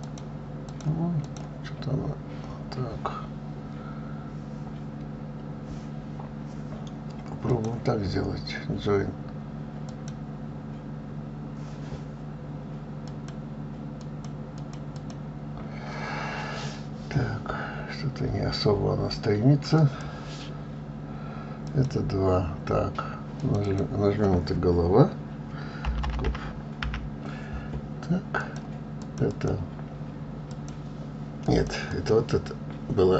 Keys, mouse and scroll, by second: 0.3 click, 1.0 click, 1.5 click, 7.8-10.8 drag, 13.4 click, 14.3 click, 14.9 click, 15.2 click, 16.9 scroll down 4, 17.7 scroll up 3, 20.1 click, 22.0 click, 23.7 click, 23.9-27.0 drag, 29.3 click, 29.6-32.0 drag, 32.2 click.